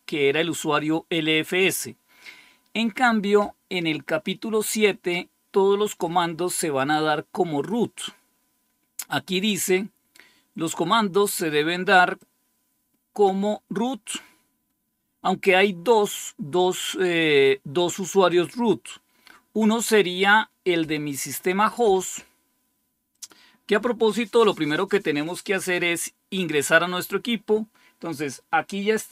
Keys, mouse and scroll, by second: 12.1-13.2 drag, 13.4-14.8 drag, 23.0-29.1 drag.